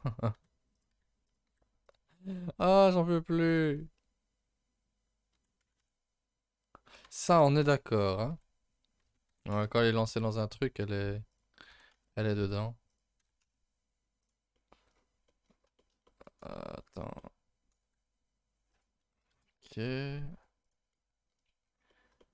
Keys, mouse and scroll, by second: 0.3 r, 0.9 g, 1.5 r, 5.3 r, 7.4 r, 11.7 r, 13.2 r, 14.5 middle click, 14.9-15.7 scroll up 9, 15.3 middle click, 15.8-16.8 shift+middle drag, 16.8 scroll up 4, 17.2 middle click, 17.8 g, 19.3 KP_0, 19.9-20.3 scroll up 1, 20.3 g, 20.9 middle click, 21.3-21.9 scroll up 9, 21.9 middle click.